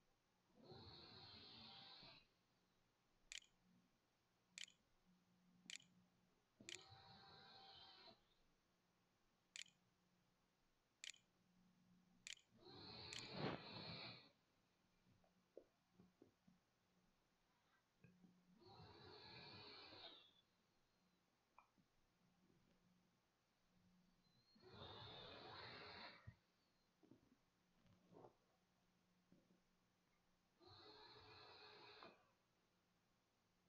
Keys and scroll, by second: 3.3-5.6 typing, 6.1 ctrl+c, 6.3 ctrl+v, 7.6-9.4 typing, 10.3 Return, 11.2 shift+Return, 11.4 shift+], 12.1 shift+[, 12.5 ], 12.6 Return, 13.9-15.5 typing, 17.3 f, 27.3 d.